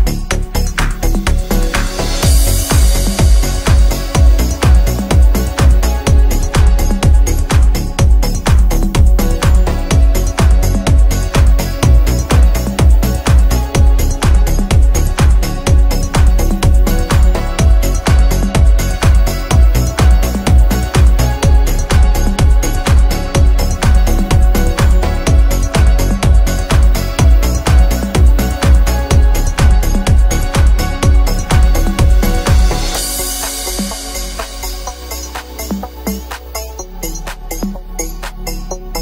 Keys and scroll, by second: 1.1 ctrl+q, 26.3 ctrl+z, 37.9 F3, 38.2 Escape.